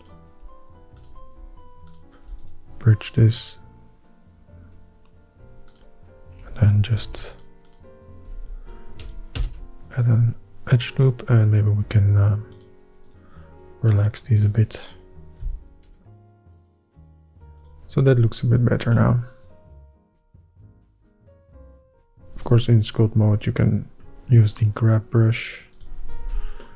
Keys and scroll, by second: 7.0 ctrl+r, 9.2 ctrl+KP_Add, 9.5 ctrl+KP_Add, 16.0 shift+r, 17.2 h, 24.9 ctrl+Tab, 26.4 alt+q.